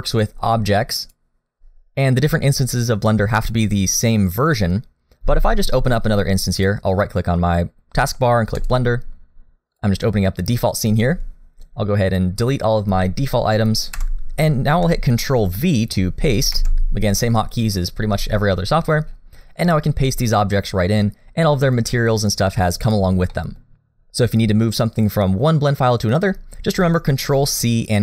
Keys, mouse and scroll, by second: 0.2 click, 9.7 click, 11.6 click, 13.9 Delete, 16.6 ctrl+v, 18.6-19.7 scroll up 7, 19.7 middle click, 21.3 scroll up 1, 22.5 middle click, 23.3 middle click.